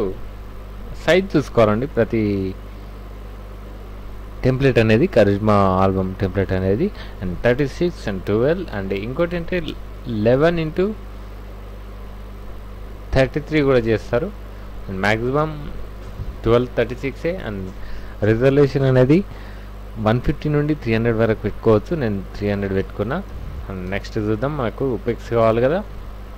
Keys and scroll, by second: 23.3 KP_Subtract, 23.9 KP_Add.